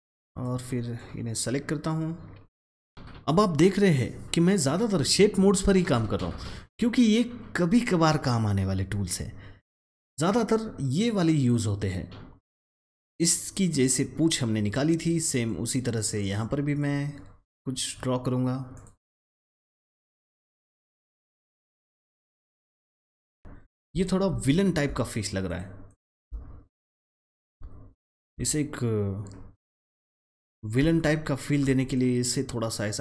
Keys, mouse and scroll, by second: 2.9 ctrl+z, 12.6 click, 12.8 double click, 15.4 click, 19.5 alt+click, 19.8-21.5 alt+drag, 21.5 alt+scroll up 1, 21.7 click, 22.7 click, 23.4 alt+scroll up 1, 24.4 alt+scroll down 1, 24.5 alt+scroll up 1, 25.4 click, 26.7 shift+click, 27.1 alt+scroll up 1, 30.0-31.8 drag, 31.8 double click.